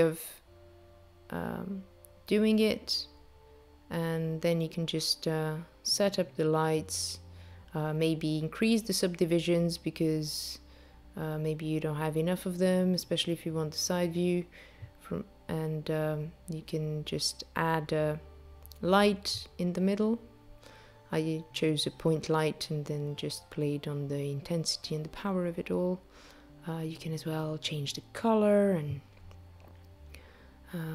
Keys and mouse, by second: 13.4 space, 14.6 ctrl+a, 16.8 shift+a, 23.5 click, 24.8 click, 27.5 0.